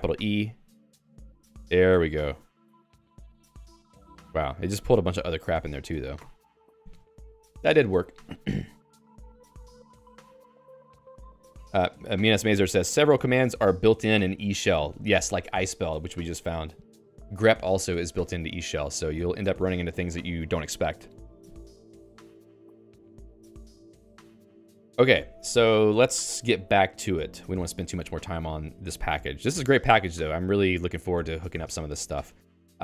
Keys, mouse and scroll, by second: 0.1 e, 2.8 Down, 3.3 Page_Down, 4.4 Page_Down, 5.0 Page_Up, 5.4 Page_Up, 5.7 Page_Up, 6.1 q, 26.1 Escape, 26.6-32.8 typing.